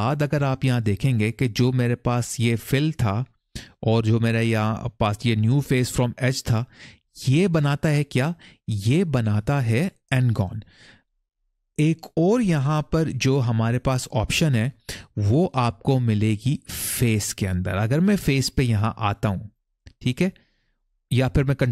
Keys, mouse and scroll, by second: 19.2 click.